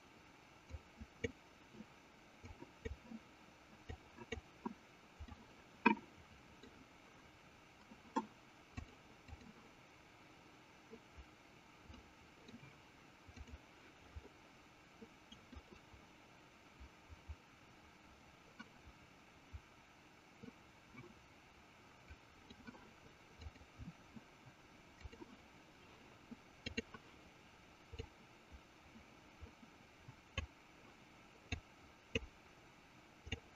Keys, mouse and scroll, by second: 1.1 click, 3.0 click, 4.3 click, 5.5-6.8 middle drag, 8.7-10.3 drag, 12.2 middle click, 13.6 click, 15.8-22.5 middle drag, 23.3-25.6 drag, 28.5-30.7 drag, 31.9 click.